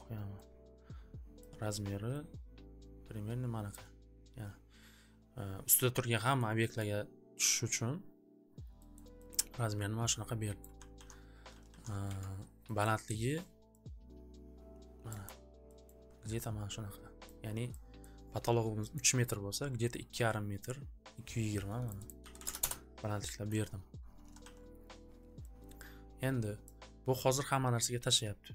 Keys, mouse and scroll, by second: 1.5 click, 3.7 click, 6.3 middle click, 6.8 middle click, 7.7 scroll, 8.9-9.4 scroll, 10.6 click, 10.8 ц, 11.6 alt+ц, 11.7 alt+ц, 12.0 я, 12.8 scroll, 13.9 scroll, 15.0 click, 15.8 scroll, 17.2 click, 17.8-18.3 scroll, 18.9 scroll, 21.8 click, 21.9-23.4 typing, 22.2 click, 23.4 scroll, 24.2 alt+w, 24.4 alt+w, 25.8-26.9 typing, 26.0-26.6 scroll, 26.6 click, 28.1 click.